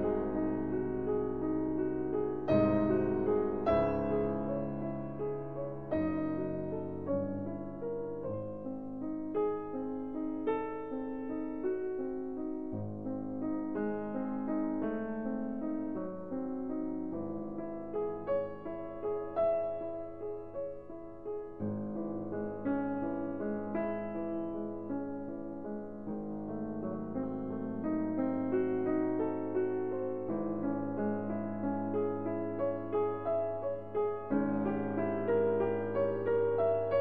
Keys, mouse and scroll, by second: 3.0 alt+m, 5.3-9.5 drag, 8.8 alt+m, 13.2-14.8 middle drag, 18.7 KP_1, 22.1-23.3 middle drag, 25.6-26.9 middle drag, 27.0-30.5 middle drag, 30.5-33.7 drag, 34.2 alt+m, 36.4-37.0 drag.